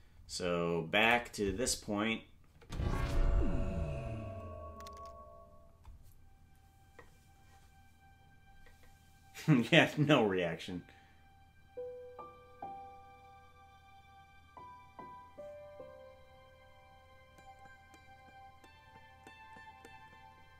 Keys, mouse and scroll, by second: 1.0 click, 2.5 space.